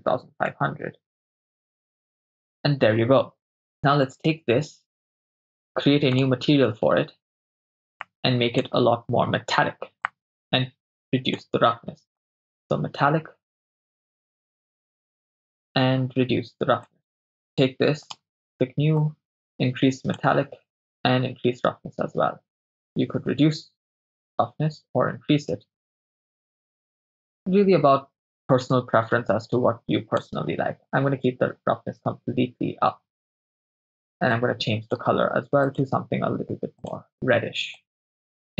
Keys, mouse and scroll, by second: 0.8 0, 3.7-5.4 drag, 3.7 right click, 6.1-6.8 drag, 8.0 click, 10.1-11.4 drag, 12.2-15.4 drag, 16.9 click, 17.3 right click, 18.1 click, 19.0 click, 20.9-30.3 drag, 34.3 click, 35.7 click.